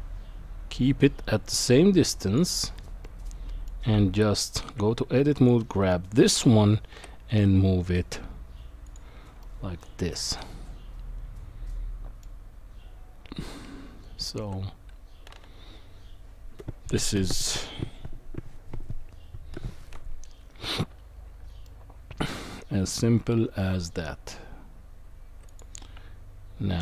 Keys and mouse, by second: 3.0-3.7 middle drag, 3.9 Tab, 5.6 click, 6.9 g, 9.4-12.2 middle drag, 13.6 Tab, 21.6-22.3 middle drag, 25.9 Tab.